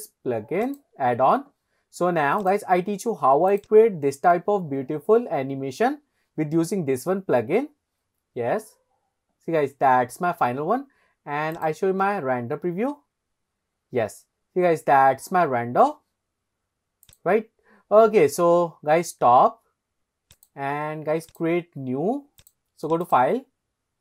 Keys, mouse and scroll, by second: 2.5 click, 3.6 drag, 12.4 click, 17.4 click, 20.5 click, 21.4-22.1 drag, 23.1 click.